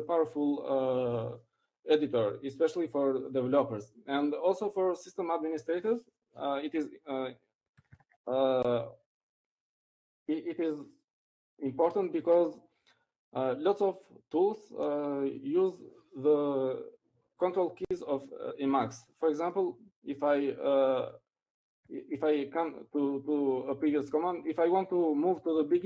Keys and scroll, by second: 11.4 ctrl+x, 11.4 ctrl+c.